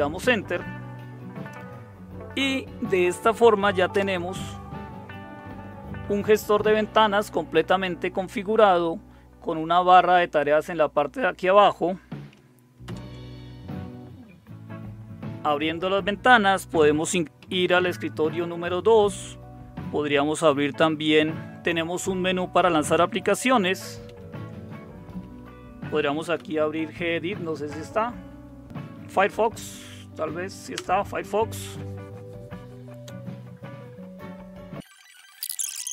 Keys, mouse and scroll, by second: 0.0 Return, 3.9 super+Return, 12.8 super+Return, 17.4 super+2, 24.0 super+d, 26.0-26.8 typing, 28.6-30.6 typing, 30.7 Return.